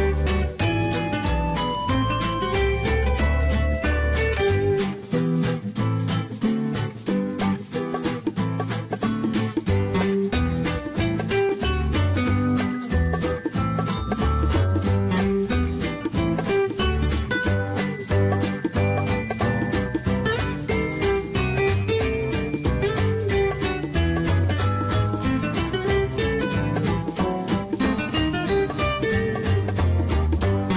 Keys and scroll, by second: 2.7 ctrl+z.